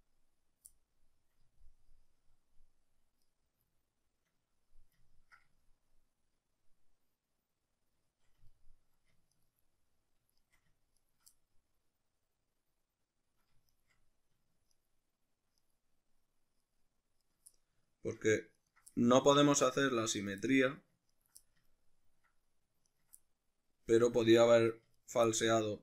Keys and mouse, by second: 3.3 right click, 3.7-9.3 ctrl+middle drag, 9.3 ctrl+right click, 9.6-10.4 middle drag, 10.4 shift+right click, 11.0 ctrl+right click, 11.3-13.7 middle drag, 13.7 shift+right click, 14.7 ctrl+right click, 15.6 ctrl+right click, 16.7 ctrl+right click, 17.3 ctrl+right click, 17.5-18.6 middle drag, 18.6 ctrl+right click, 19.0-20.2 middle drag, 20.2 ctrl+right click, 20.5-21.1 middle drag, 21.1 ctrl+right click, 21.5-22.9 ctrl+middle drag, 22.9 ctrl+right click, 23.2-24.4 middle drag, 24.4 ctrl+right click, 25.0 ctrl+right click, 25.3-25.8 middle drag.